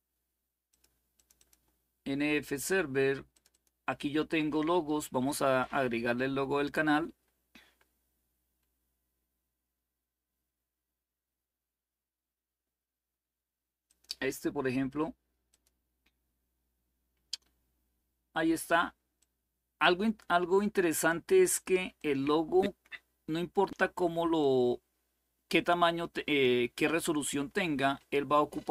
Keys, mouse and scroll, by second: 0.4 click, 0.9 click, 1.2 click, 3.1-4.1 drag, 13.6 click, 15.2 click, 18.3 click, 21.5 click, 21.7-23.2 drag, 24.1-28.7 drag.